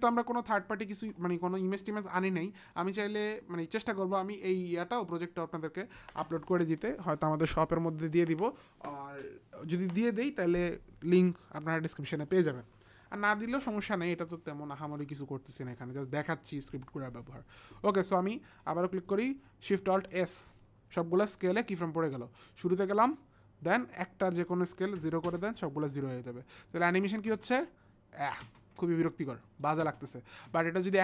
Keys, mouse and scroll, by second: 18.4 click, 19.8 alt+shift+s, 22.4 click, 24.3 click, 25.0 KP_0, 25.3 Return, 26.8 click, 27.3 space, 28.5 space, 29.3 click, 29.9 space, 30.5 space.